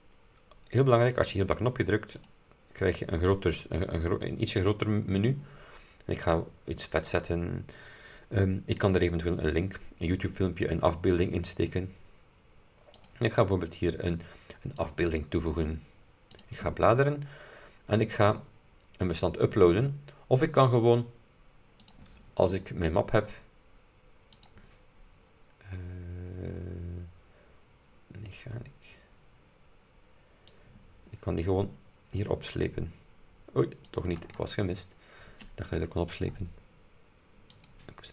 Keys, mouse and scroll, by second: 2.3 click, 6.4 click, 6.9 click, 13.0 click, 14.9 click, 16.5 click, 21.9 click, 24.4 click, 29.5 scroll up 2, 30.6-32.5 drag, 34.2 click, 37.6 click.